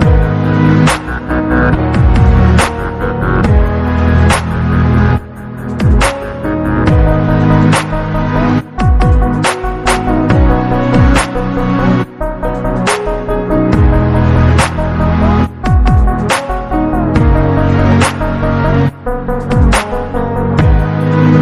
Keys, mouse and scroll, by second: 1.2 click, 1.5 click, 1.9-2.2 scroll down 2, 2.2 KP_1, 2.7-3.2 scroll up 1, 3.2 click, 3.5 scroll up 2, 4.1 g, 8.4 click, 9.1 g, 11.0 click, 12.2 drag, 13.1 g, 15.3 click, 16.1 click, 16.7-17.3 scroll down 5, 17.4 click, 18.0 shift+click, 18.2 shift+click, 18.6-18.9 scroll down 3, 19.1-19.4 scroll down 4, 19.6 g.